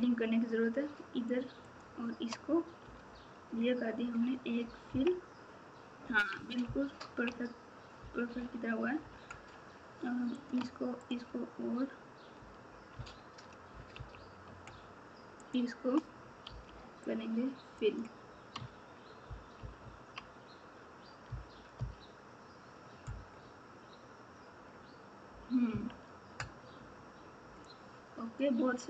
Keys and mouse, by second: 1.6 shift+click, 4.8 KP_3, 6.6 ctrl+KP_2, 7.1 ctrl+KP_2, 8.3 KP_8, 13.9 KP_2, 16.4 f, 19.5 KP_6, 19.8 KP_6, 20.0 KP_6, 21.2 KP_4, 21.7 KP_4, 25.7 KP_3.